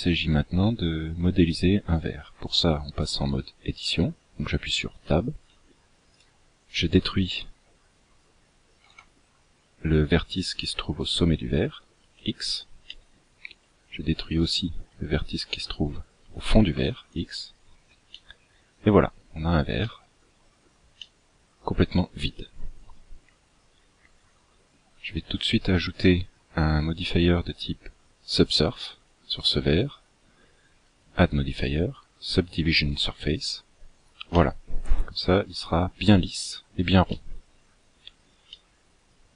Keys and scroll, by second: 4.8 Tab, 8.7 x, 16.6 x.